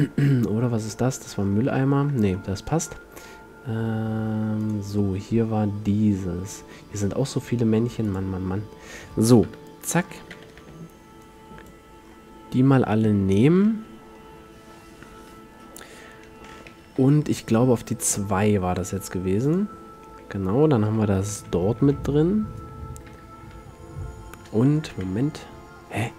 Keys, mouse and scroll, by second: 1.4 a, 2.8-4.7 middle drag, 4.7 click, 8.2-9.6 drag, 9.6 KP_7, 10.4 z, 10.7 b, 14.2-16.2 middle drag, 17.1 m, 19.6-21.5 drag, 21.0 z, 21.9 a, 23.2 KP_3, 23.6 KP_2, 25.0 KP_5.